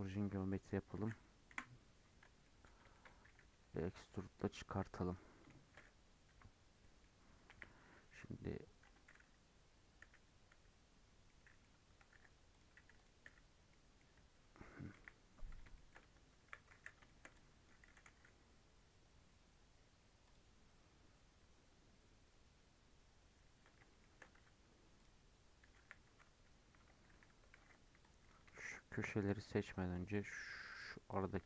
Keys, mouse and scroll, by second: 0.0 right click, 0.4-1.4 middle drag, 1.4 KP_Decimal, 2.2 middle click, 2.5 Tab, 2.9 shift+middle click, 3.2 e, 6.2 KP_Decimal, 6.5 scroll down 3, 6.8 middle click, 7.4 KP_1, 8.8 Tab, 10.0 /, 10.4 /, 11.0 scroll down 2, 11.2 middle click, 12.1 alt+h, 12.5 click, 12.9 click, 13.2 /, 13.5-14.3 scroll down 9, 13.6 middle click, 14.9 KP_1, 15.7 shift+middle click, 15.9 Tab, 16.4 1, 16.7 alt+z, 17.0 shift+middle click, 17.3 click, 17.8 g, 22.5-23.1 scroll up 1, 23.1-23.9 scroll down 1, 23.9 shift+middle click, 24.3 Tab, 24.9 click, 25.5 Tab, 25.7 1, 26.2 alt+z, 27.0 2, 27.5 alt+z, 27.9 click, 28.7 shift+click, 29.4 2, 30.1 alt+click, 30.7 alt+shift+click, 31.0 alt+shift+click.